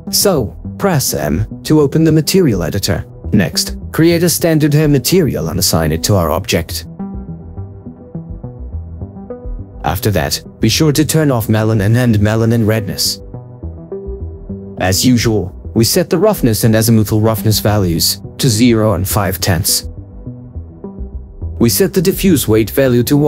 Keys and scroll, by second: 0.7 Delete, 5.7 ctrl+4, 16.0 BackSpace, 16.6 5, 17.1 Return, 18.7 Insert, 19.0 BackSpace, 19.8 5, 20.2 Return.